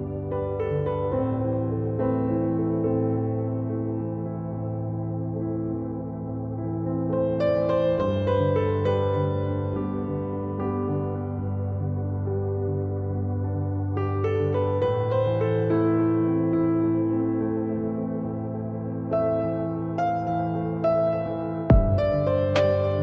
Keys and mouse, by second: 12.5 ctrl+z, 22.1 z.